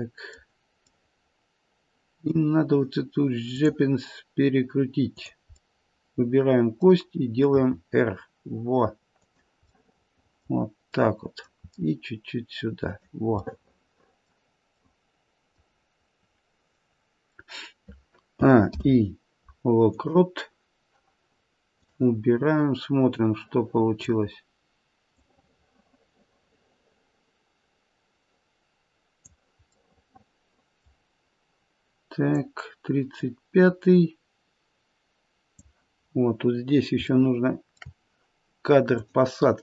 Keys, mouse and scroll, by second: 0.9 middle click, 3.6 click, 5.1 click, 5.6 middle click, 6.6 middle click, 7.5 r, 9.6 middle click, 10.9 middle click, 11.6 r, 13.4 middle click, 14.7 middle click, 15.7-16.1 scroll down 2, 18.3 a, 18.7 i, 21.7 click, 23.0 click, 29.8 middle click, 32.4 click, 35.9-36.6 scroll down 1, 36.6-37.0 scroll up 1, 37.0 shift+middle click, 38.9 click.